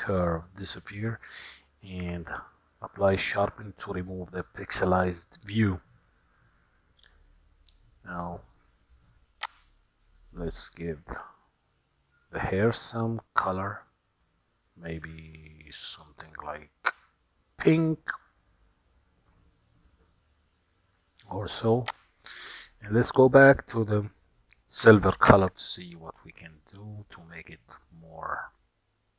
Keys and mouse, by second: 0.1 Tab, 2.1 q, 7.9-9.1 middle drag, 9.5 click, 10.9 click, 13.1 click, 22.1 click, 26.2-27.6 middle drag.